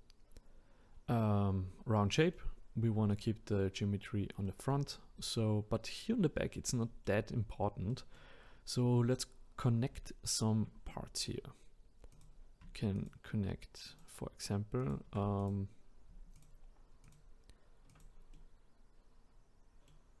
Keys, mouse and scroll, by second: 5.4-6.8 scroll down 1, 6.8 middle click, 7.3-7.9 scroll up 1, 7.9-9.0 middle drag, 9.0-12.1 scroll down 2, 12.1 click, 13.0 shift+click, 13.9 shift+click, 14.8 shift+click, 15.4 click, 16.3 shift+click, 17.0 shift+click, 17.9 shift+click, 18.3-20.2 middle drag.